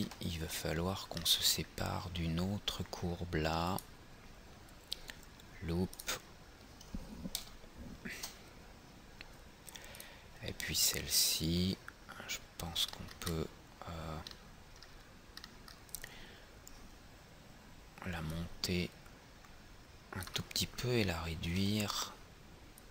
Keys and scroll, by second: 7.5 ctrl+Return.